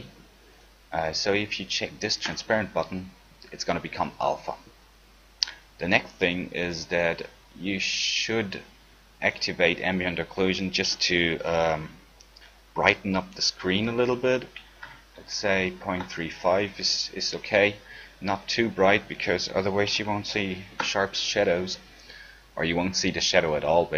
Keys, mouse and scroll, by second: 11.3-14.6 middle drag, 18.6-20.4 drag.